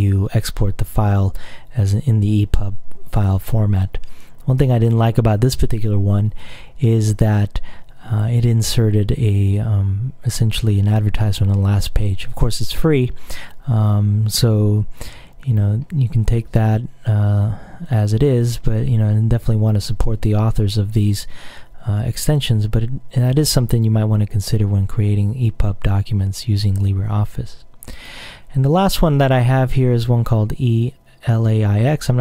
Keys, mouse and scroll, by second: 4.4-4.9 scroll down 2, 9.9-10.5 scroll up 2, 14.7-15.9 scroll up 2, 17.9 click, 18.5-19.2 scroll up 2, 19.2-19.8 scroll down 1, 23.9-25.1 scroll up 2, 25.6-26.6 scroll up 2, 28.0 click.